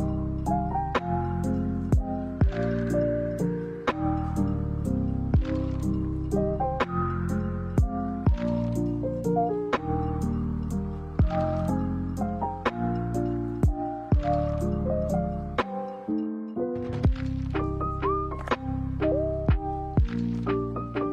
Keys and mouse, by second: 0.5 middle click, 4.1 alt+right click, 8.7 ctrl+r, 14.1 alt+right click, 16.3 click, 17.5 g.